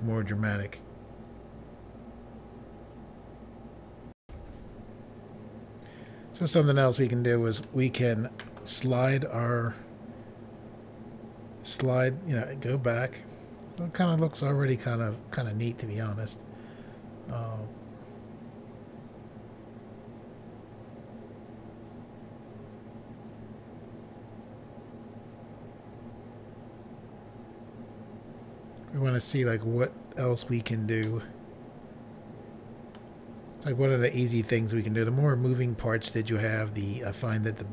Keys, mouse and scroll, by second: 4.2 Pause, 6.5 middle click, 9.6 click, 31.0 middle click, 34.4 click.